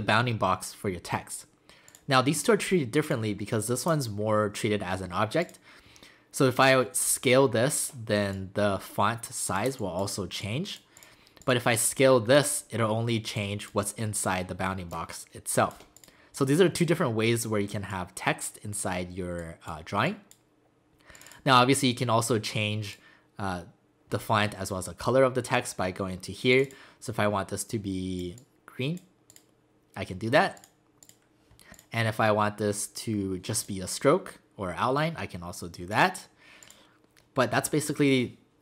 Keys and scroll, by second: 9.7 space.